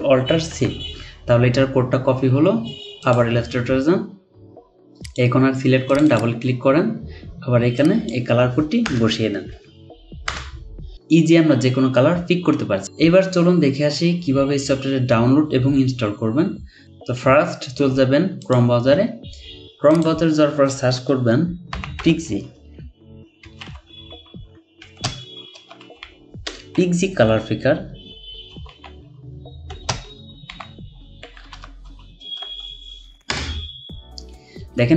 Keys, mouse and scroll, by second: 0.5 ctrl+alt+c, 6.1 double click, 8.8-9.4 typing, 21.7-23.6 typing, 24.8-27.2 typing, 28.5-29.7 typing, 33.3 Return.